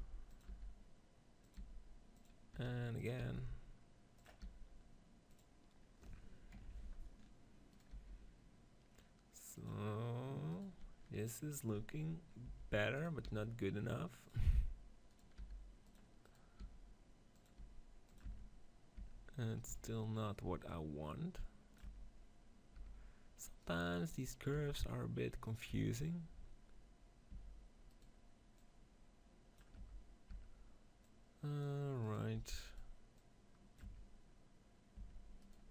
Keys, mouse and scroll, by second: 0.5-7.2 drag, 0.5 r, 1.6 g, 2.5 e, 3.1 r, 4.3 g, 7.7-9.4 right drag, 7.9 g, 10.4-12.3 right drag, 11.7 Tab, 12.3 Tab, 12.8-14.8 right drag, 13.1 r, 14.4 g, 15.1-16.7 right drag, 15.3 r, 15.8 click, 16.5 r, 17.4 g, 18.0-19.6 right drag, 18.1 Tab, 18.9 Tab, 20.0-22.4 right drag, 20.6 click, 21.9 Tab, 22.6 Tab, 23.5-27.2 right drag, 24.4 r, 25.5 click, 25.6 Tab, 27.2 Tab, 29.7 Tab, 30.3 Tab, 31.0-32.8 drag, 31.9-33.8 right drag, 33.0-34.8 drag, 33.8 Tab, 34.8 Tab, 35.3-35.7 drag.